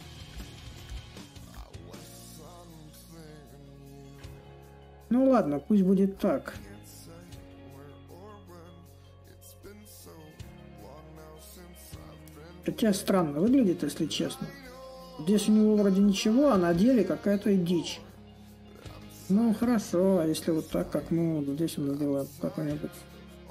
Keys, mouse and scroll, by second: 0.0-5.0 drag, 5.8-12.0 drag, 12.5-17.5 drag, 20.4-23.5 drag.